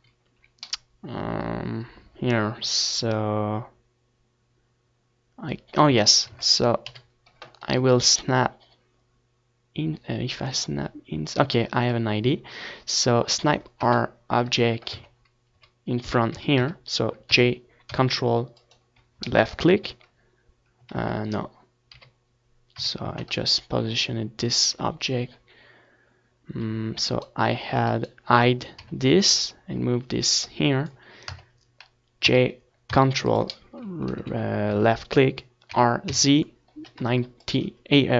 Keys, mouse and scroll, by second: 3.8 Tab, 3.9 middle click, 4.1 ctrl+s, 4.6 KP_7, 7.4 click, 9.6-10.9 drag, 11.3 KP_3, 12.5 Tab, 13.1-14.9 typing, 16.2-18.0 drag, 17.0 z, 18.5 ctrl+z, 19.5 KP_7, 20.1 KP_3, 20.6 Tab, 20.7 middle click, 21.2 z, 24.6-27.5 right drag, 26.1 h, 27.5-28.5 middle drag, 28.5 Tab, 28.5 click, 29.5 g, 30.6 click, 30.8 middle click, 31.4 click, 31.4 z, 32.0 Tab, 32.9 r, 34.7-37.5 drag, 37.5 alt+h, 38.1 middle click.